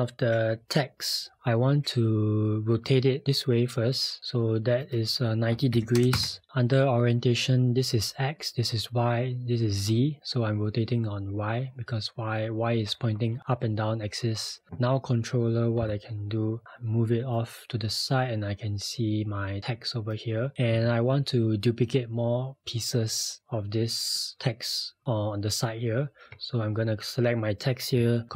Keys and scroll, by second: 5.5-6.5 typing, 15.8 p.